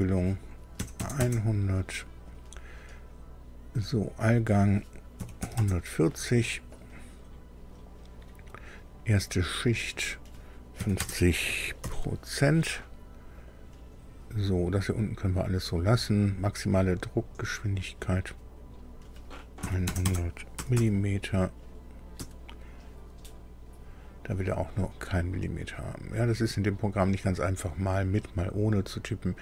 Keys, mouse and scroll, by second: 0.7 KP_1, 1.1 KP_0, 2.3 click, 4.2 click, 5.1 KP_1, 5.3 KP_4, 5.5 KP_0, 6.7 click, 9.8 click, 10.7 KP_5, 11.4 KP_0, 11.7 shift+5, 13.3 click, 18.5 click, 19.5-20.7 typing, 22.1 Tab, 23.6 click.